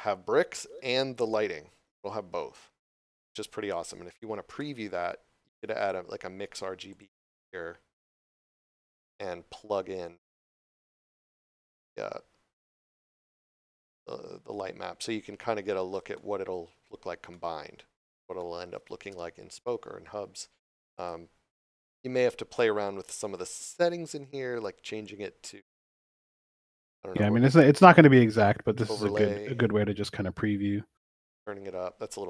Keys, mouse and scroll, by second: 5.7 click, 7.5 scroll up 1, 10.0 click, 13.5 middle click, 16.1 shift+middle click, 18.3 shift+middle click, 20.9 click, 28.4 click.